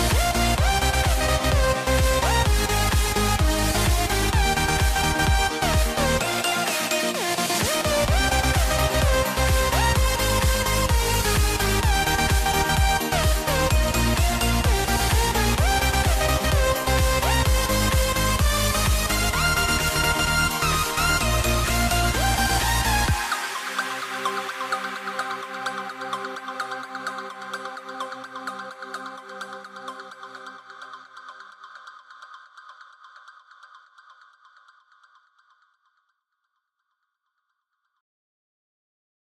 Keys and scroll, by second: 11.8 super+z, 15.5 super+z, 23.9 super+z.